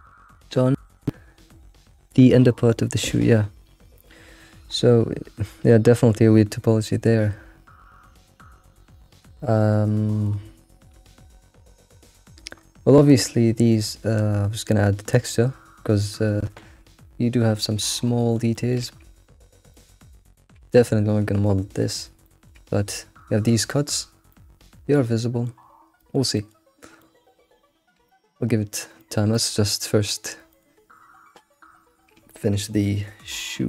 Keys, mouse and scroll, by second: 7.9-9.4 scroll up 5, 9.4-10.9 middle drag, 10.9 scroll up 3, 12.6-13.2 scroll up 3, 14.5-14.9 scroll down 3, 16.7 scroll down 1, 17.8-18.9 shift+middle drag, 18.9-19.7 scroll up 5, 19.7-21.5 shift+middle drag, 21.5-22.2 scroll down 3, 22.3-23.6 shift+middle drag, 23.6-24.4 scroll down 6, 24.4-26.4 middle drag, 27.0 alt+middle click, 28.1-30.0 middle drag, 30.0-30.5 scroll up 2, 30.5 alt+middle click, 31.0 scroll up 3, 31.5-32.2 scroll down 2, 32.3-33.3 middle drag, 33.3-33.6 scroll down 6.